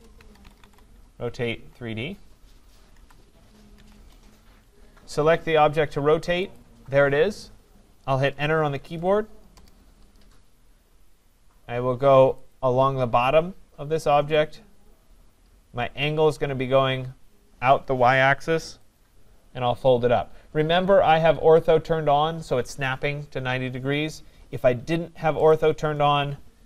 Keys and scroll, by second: 3.9 Return, 9.5 Return.